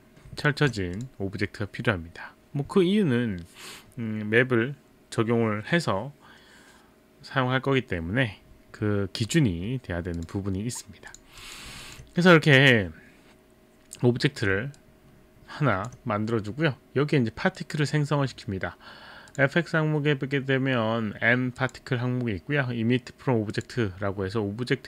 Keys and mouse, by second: 0.4 click, 0.6 alt+click, 1.0 click, 10.2 click, 11.1 click, 11.4 click, 11.8 alt+click, 17.6 click, 19.3 click, 21.6 click, 23.5 click.